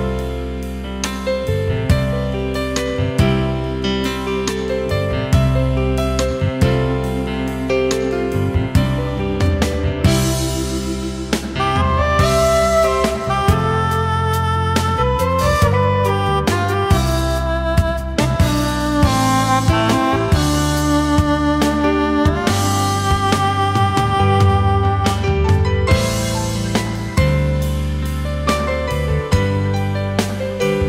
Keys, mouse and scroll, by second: 0.8 ctrl+shift+a, 1.5 ctrl+z, 3.6 alt+scroll down 1, 3.8 space, 9.1 alt+click, 11.4 ctrl+shift+a, 11.8 alt+scroll down 1, 12.1 space, 13.5-13.9 alt+scroll down 1, 14.2 space, 15.1-15.4 alt+scroll up 1, 15.4 space, 16.1-16.5 alt+scroll up 1, 17.8 space, 22.9 ctrl+shift+a, 23.2 alt+scroll down 1, 23.5 space, 25.3 alt+scroll up 1, 25.7 space.